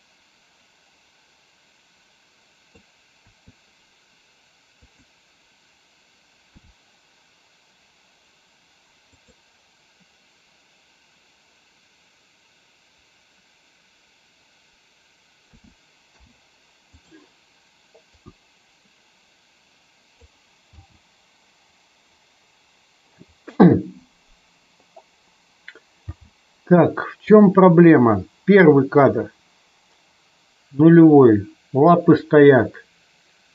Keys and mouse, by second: 3.2 KP_3, 4.7 click, 6.5 g, 15.4 a, 16.0 i, 18.1-20.2 drag, 20.6 space, 26.0 space, 27.2-33.5 drag.